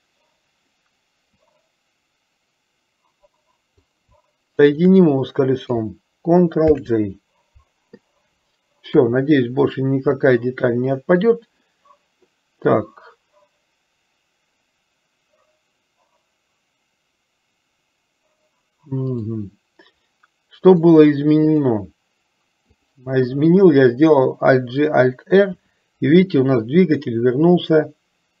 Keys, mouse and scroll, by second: 1.6-4.1 drag, 4.7 shift+click, 6.9 ctrl+j, 9.0 KP_3, 21.0-22.0 drag, 25.7 r.